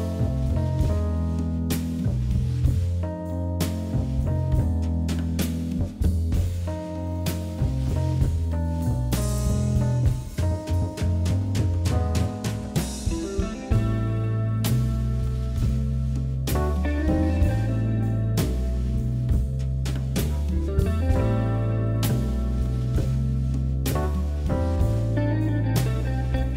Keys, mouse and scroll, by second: 1.9 s, 3.5-4.6 middle drag, 4.6 KP_Divide, 4.9-5.6 scroll up 2, 5.6 e, 6.9 Tab, 7.2-7.7 scroll down 10, 7.7 click, 8.2 KP_1, 8.9 shift+middle click, 9.6 shift+scroll down 1, 9.6 shift+middle click, 10.5 shift+a, 13.6 Delete, 14.2 shift+s, 15.5 shift+a, 17.6 KP_Divide, 18.4 Tab, 19.3 m, 20.3 click, 21.0 click, 21.9 e, 24.4 e, 26.1 e.